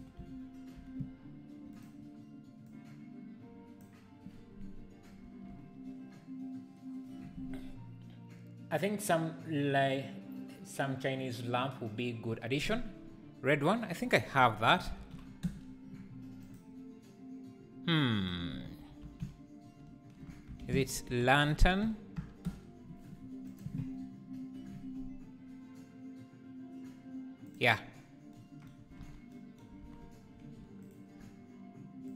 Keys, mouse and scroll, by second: 2.7 click, 15.5-22.6 drag, 23.6-27.6 drag, 27.9 scroll down 1, 29.0 alt+a, 30.9 shift+right click.